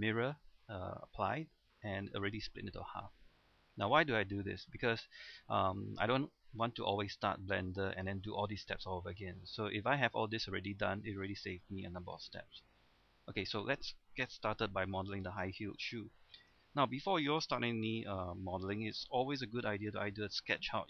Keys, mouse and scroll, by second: 4.9 scroll up 1, 5.1-5.6 scroll down 1, 5.6 middle click, 9.5 scroll down 1, 9.7-11.0 scroll up 1, 11.0-11.4 scroll down 1, 11.4-12.1 scroll up 1, 12.1-16.5 middle drag, 16.5 Tab, 16.9 scroll down 1, 17.1 middle click, 18.4 KP_7, 18.9-19.3 scroll down 1, 19.7-20.4 scroll up 1.